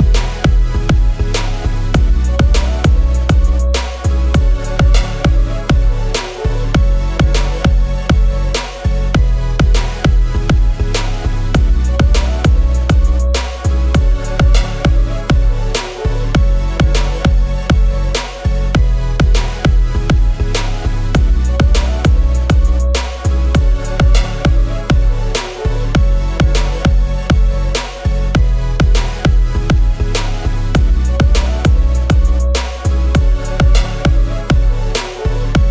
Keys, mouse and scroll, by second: 0.1 ctrl+=, 0.3 ctrl+=, 0.4 ctrl+=, 0.6 ctrl+=, 4.5-5.1 scroll, 5.1 ctrl+-, 5.3 ctrl+-, 6.2-6.7 scroll, 8.2 scroll, 15.2 shift+Up, 17.3 i, 21.5-22.2 typing, 31.6 double click.